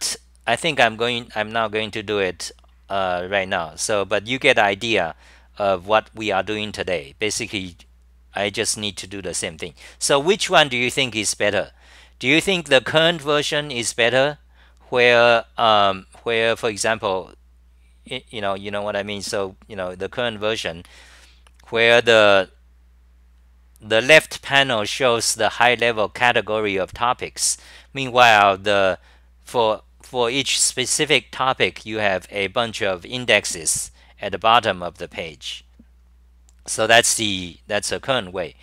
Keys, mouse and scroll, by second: 0.0-0.7 typing.